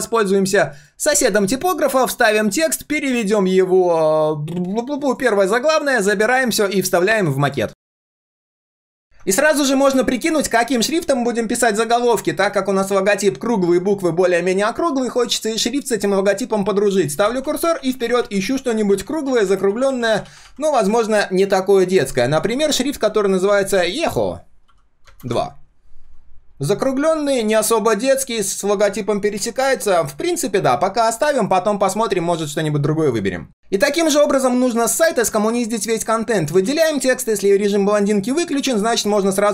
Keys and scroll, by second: 1.9 ctrl+v, 6.0 ctrl+c, 8.0 ctrl+v.